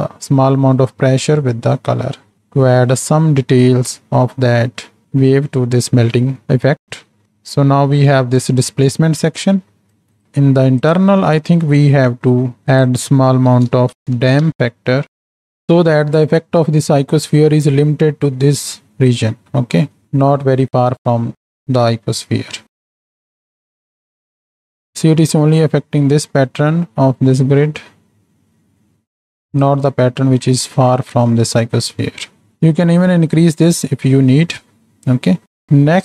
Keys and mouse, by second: 1.7 middle click, 2.4 middle click, 5.5 middle click, 7.0 middle click, 7.0 right click, 7.3-8.4 drag, 9.3 click, 10.2 click, 10.8 click, 11.6-12.1 middle drag, 12.7-14.5 drag, 20.0 middle click, 21.2 middle click, 22.8 shift+Right, 22.8 shift+Left, 23.4 space, 23.4 z, 24.8 space, 27.3-29.7 drag, 30.2-30.7 middle drag, 35.6 click.